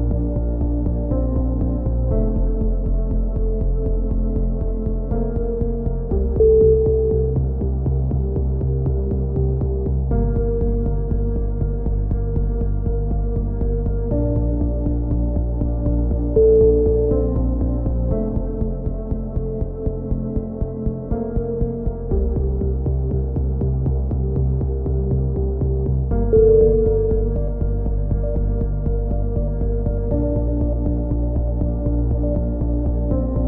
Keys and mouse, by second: 3.4 a, 4.0 ctrl+r, 4.8 click, 6.4 middle click, 6.9 b, 8.5 t, 9.5 click, 9.9-11.4 middle drag, 9.9 t, 10.6 a, 11.4 click, 11.7 right click, 12.5 middle click, 13.0 click, 14.5-15.5 right drag, 15.0 x, 15.6 z, 15.9-17.4 drag, 16.4 right click, 16.9 KP_3, 17.2 z, 19.4 g, 20.7 a, 22.2 click, 22.6 b, 23.8-24.8 drag, 24.8 s, 27.6 click, 27.9 a, 28.0 z, 28.8 click, 30.6-33.2 right drag, 31.6 KP_7, 32.1 z.